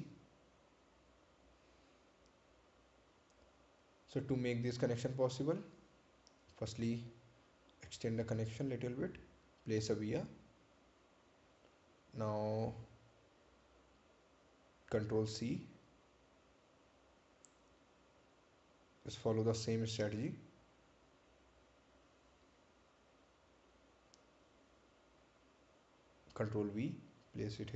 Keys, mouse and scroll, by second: 4.4 click, 9.5 right click, 11.5 ctrl+v, 12.4 click, 14.9 shift+click, 17.7 shift+click, 20.2 ctrl+c, 21.4 click, 24.1-24.4 scroll down 1, 26.0 ctrl+click, 27.2 scroll up 1.